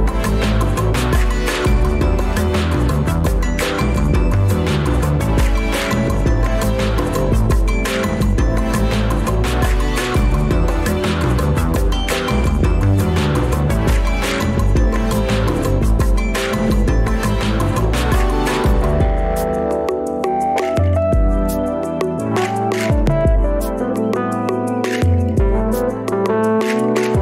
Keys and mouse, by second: 19.8 g.